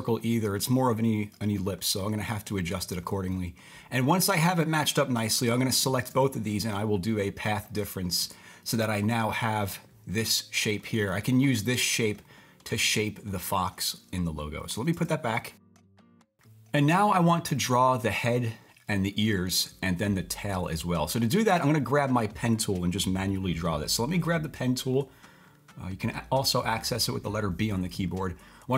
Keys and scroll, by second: 14.9 super+z.